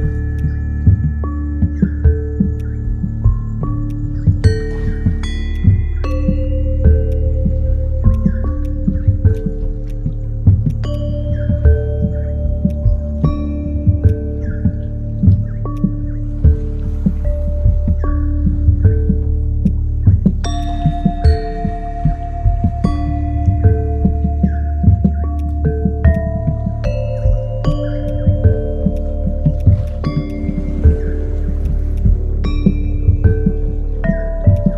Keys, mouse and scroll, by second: 24.1 ctrl+i, 24.5 ctrl+w, 27.7 ctrl+shift+click, 27.7 ctrl+i, 28.9 ctrl+click, 29.9 ctrl+click, 34.1 ctrl+z, 34.5 shift+click.